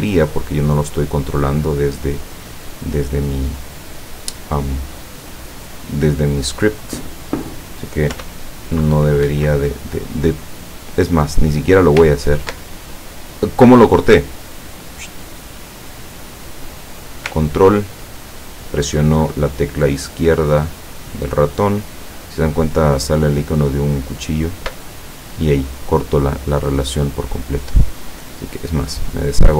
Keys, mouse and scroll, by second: 1.3 click, 2.1 click, 8.2 p, 9.3 Escape, 12.1 ctrl+click, 14.6 click, 16.1 click, 20.7-24.9 ctrl+drag, 27.6 click, 28.9 click.